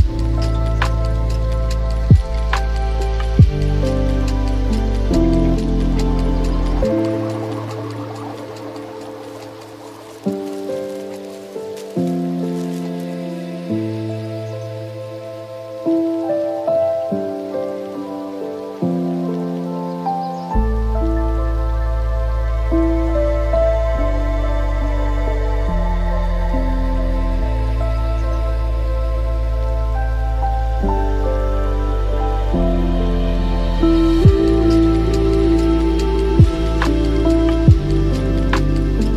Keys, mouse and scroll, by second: 1.6 click, 2.5-2.9 drag, 3.6-4.3 ctrl+middle drag, 4.3-4.7 drag, 5.8-7.3 drag, 7.3-7.9 scroll down 10, 7.9 scroll up 1, 8.0 scroll down 4, 8.3-10.2 middle drag, 10.2 scroll down 4, 11.0 click, 11.9 click, 12.6-14.0 middle drag, 14.0-14.8 scroll up 10, 14.8-16.0 scroll down 14, 16.9-18.1 scroll up 1, 18.1-18.6 scroll up 2, 18.6-19.7 middle drag, 19.7 click, 24.5-28.1 ctrl+middle drag, 28.1 click, 29.1 KP_0, 29.3 KP_Decimal, 30.8-34.2 drag, 34.2-35.3 ctrl+middle drag, 35.3 ctrl+KP_2, 35.6 ctrl+KP_2, 36.4-39.1 ctrl+middle drag.